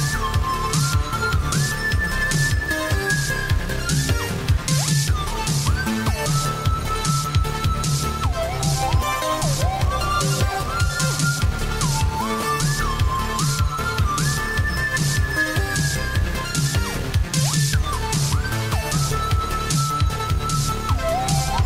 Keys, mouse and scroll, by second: 0.0 typing, 5.0 click, 8.9 click, 15.3 click.